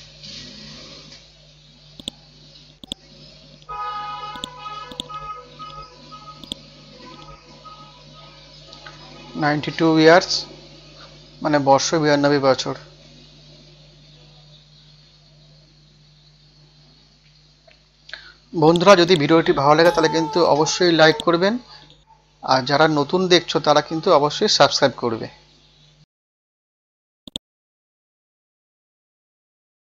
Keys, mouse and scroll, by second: 2.0 click, 3.9 scroll down 1, 4.3 click, 4.9 right click, 5.2 scroll up 1, 6.4 click, 6.7 ctrl+a, 8.1 KP_9, 8.3 KP_2, 10.7 ctrl+a, 12.0 shift+y, 12.8 BackSpace, 13.2 shift+3, 14.8 KP_9, 15.0 KP_2, 16.5-16.8 scroll down 1, 17.4 scroll up 1, 18.7 click, 19.7 F5, 20.1 Delete, 21.1-23.1 drag, 23.7 e, 25.1 Down, 25.4 Down, 27.3 click, 27.7 scroll down 1, 28.6-29.8 scroll up 1.